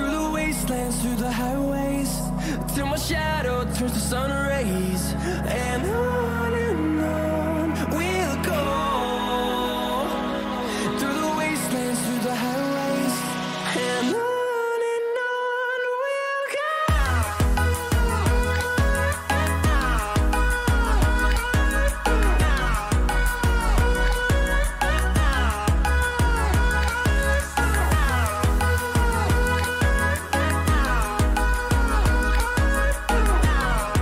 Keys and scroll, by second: 6.7 ctrl+-, 10.4 ctrl+-, 11.0 ctrl+-, 17.6 t, 23.2-25.6 typing.